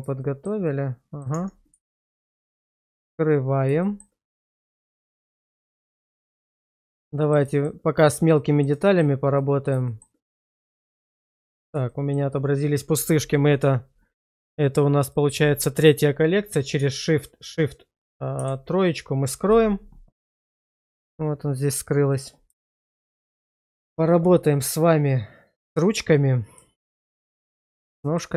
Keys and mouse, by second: 0.2 middle click, 0.7 middle click, 1.3 Tab, 2.8 click, 3.8 middle click, 4.3 middle click, 5.1 middle click, 5.9 middle click, 6.4 shift+middle click, 7.1 middle click, 7.5 shift+middle click, 8.3 middle drag, 8.8 shift+middle drag, 9.4-9.7 middle drag, 9.9 shift+middle drag, 11.9 shift+middle drag, 15.0 click, 18.4 shift+3, 22.6 shift+middle click, 23.3 click, 26.9 shift+middle drag, 27.4-27.8 middle drag, 28.0 shift+middle click.